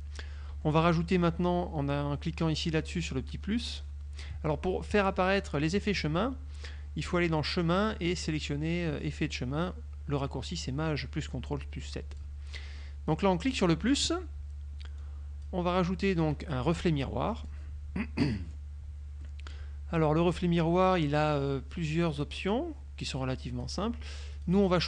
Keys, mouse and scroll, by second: 0.6 F1, 7.2 click, 12.2 click, 13.6 click, 15.1-15.7 drag, 16.8 click, 17.5 click, 18.3 middle click, 19.3 click, 22.3 click, 23.1 click, 24.4 click.